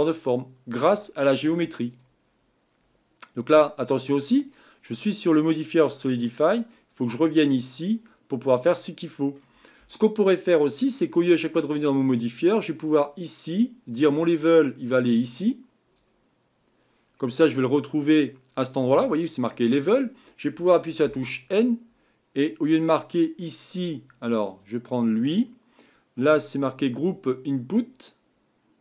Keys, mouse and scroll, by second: 0.0-2.0 middle drag, 2.0 click, 6.9-15.9 drag, 21.0 n.